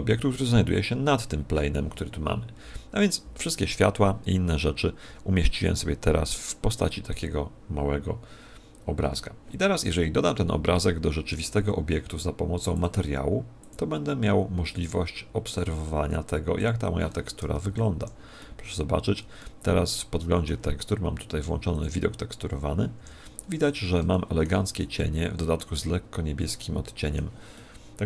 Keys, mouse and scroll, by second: 12.7 click, 13.6 click, 16.6 click, 17.6 alt+z, 18.4 middle click, 19.4 middle click, 21.7 click, 22.9 Escape, 23.4 scroll up 5, 24.9 shift+middle click, 24.9-25.4 scroll up 7, 26.6 middle click, 27.5 middle click.